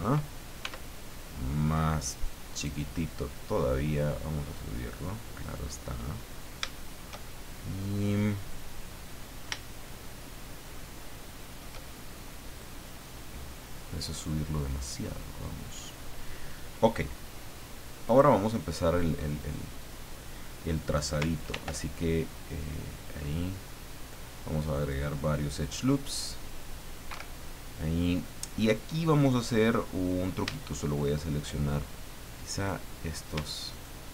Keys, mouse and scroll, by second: 0.6 s, 2.5 click, 3.7-5.7 drag, 5.8-6.2 scroll up 2, 6.4 scroll up 3, 6.7-7.9 shift+middle drag, 8.5-10.9 middle drag, 11.0 shift+middle click, 12.6-16.0 drag, 15.1 middle click, 18.1 click, 21.5 ctrl+r, 23.1-24.2 scroll up 6, 24.8 click, 27.1 Escape, 32.6 click, 33.7 shift+right click.